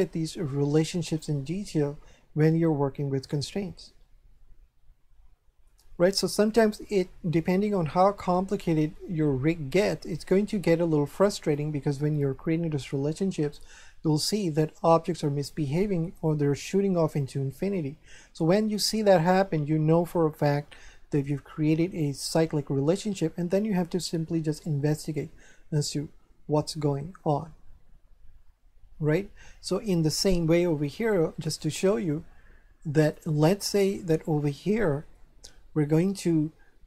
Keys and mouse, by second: 3.2 shift+middle click, 31.4 right click, 33.0 click, 34.0 shift+middle click.